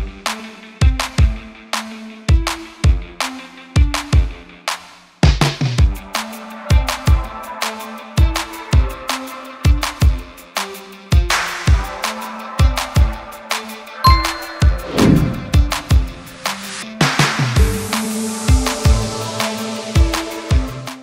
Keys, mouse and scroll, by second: 8.1-10.1 alt+drag.